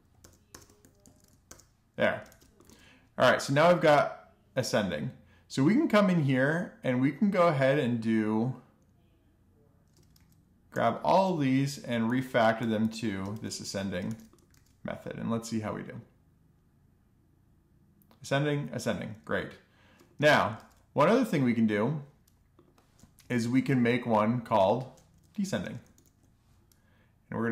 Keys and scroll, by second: 0.3 Right, 0.5 Right, 0.8 BackSpace, 1.6 alt+shift+f, 2.0 super+s, 9.4 super+d, 10.0 super+d, 10.6-11.9 typing, 12.6 alt+shift+f, 13.8 super+s, 19.5 alt+shift+f, 19.8 super+s, 22.5 alt+shift+Down, 24.2-25.3 typing, 26.9-27.2 typing.